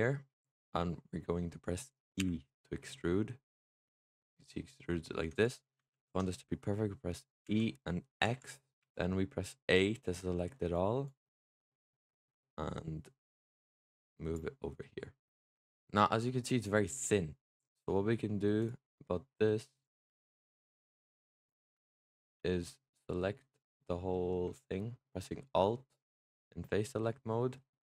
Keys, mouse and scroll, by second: 2.1 e, 5.8 ctrl+z, 7.3 e, 8.7 a, 10.9 click, 14.7 middle click, 15.6 click, 15.7-18.5 middle drag, 18.5-19.7 drag, 20.2 alt+click, 20.7-21.2 scroll up 2, 21.2 click, 21.8 alt+click, 22.4-27.8 middle drag.